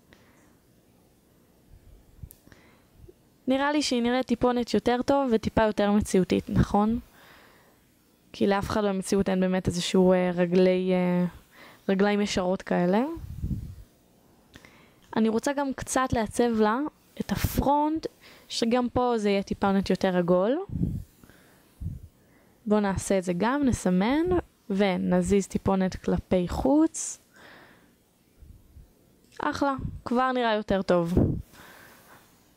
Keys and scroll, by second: 1.2 1, 8.2 1, 12.2 a, 17.9-18.3 typing, 20.2 typing, 25.9 b.